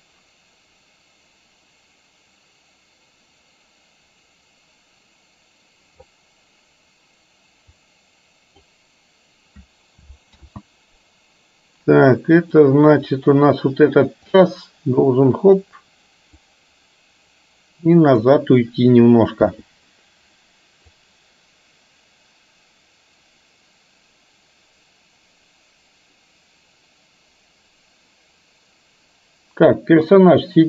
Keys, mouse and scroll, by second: 8.0 click, 10.5 ctrl+z, 12.6 click, 14.4 click, 14.7 click, 16.5-18.1 middle drag, 18.1 click, 21.1-30.6 drag.